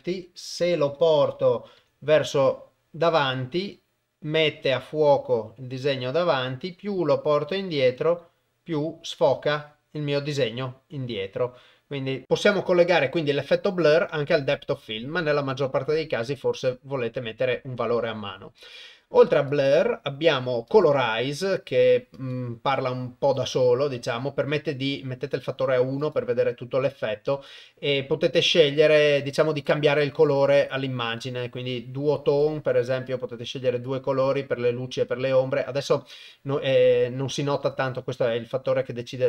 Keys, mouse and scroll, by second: 0.5 g, 14.4 click, 18.6 click, 19.3-20.9 drag, 22.2-23.5 drag, 24.6 click, 26.0-27.5 drag, 28.3 click, 32.3 click, 37.7-39.2 shift+drag.